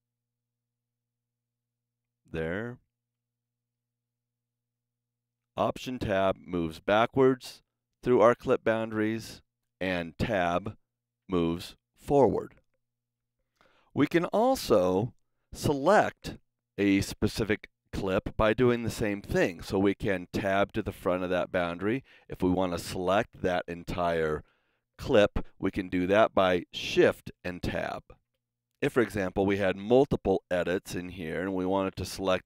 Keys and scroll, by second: 3.2 alt+Tab, 4.6 alt+Tab, 5.7 alt+Tab, 6.6 alt+Tab, 8.0 alt+Tab, 9.0 alt+Tab, 10.5 Tab, 20.4 Tab, 28.2 shift+Tab, 30.7 b, 31.7 b.